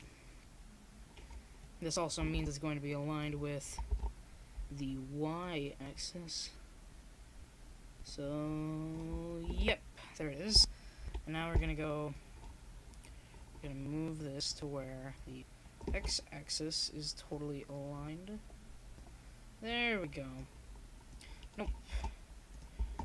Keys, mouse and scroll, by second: 4.8-6.3 right drag, 6.3 click, 6.3 m, 8.4 click, 9.6 KP_0, 10.0 click, 10.4 middle click, 12.4 KP_1, 12.5 click, 17.3-19.4 drag, 19.4 middle click, 19.5-21.5 drag, 21.5 middle click, 22.3 click.